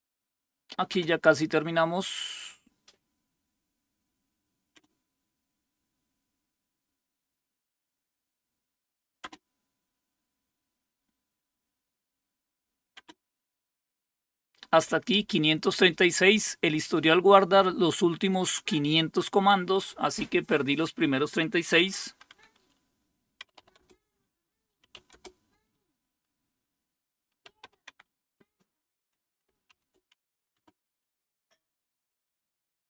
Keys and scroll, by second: 21.8 typing, 23.2-25.4 typing, 27.2-27.9 typing, 29.5-30.5 typing.